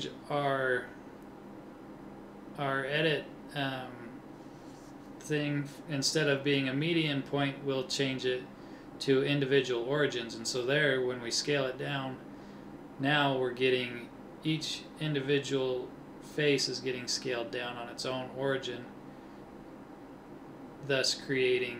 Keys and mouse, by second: 1.1-2.9 middle drag, 4.3 s, 4.9-11.2 middle drag, 16.1-19.1 middle drag, 19.1 KP_3, 20.6 ctrl+Tab.